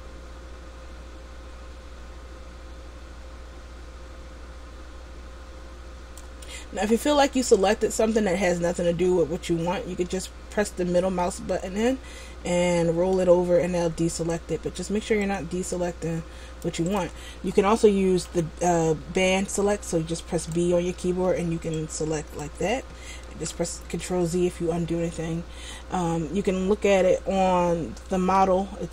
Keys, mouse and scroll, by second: 17.1 right click, 18.5 b, 21.3 b, 23.4 ctrl+z, 25.1 middle click.